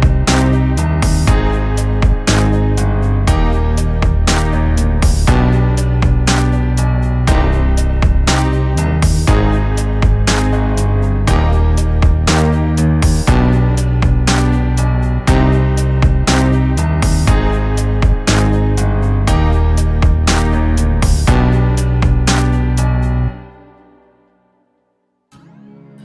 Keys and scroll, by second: 1.0 ctrl+z, 3.3 ctrl+-, 5.2 ctrl+-, 6.2 ctrl+=, 10.3 ctrl+-, 11.5 ctrl+-, 12.2 u, 13.8 u, 20.7 u, 22.5 u.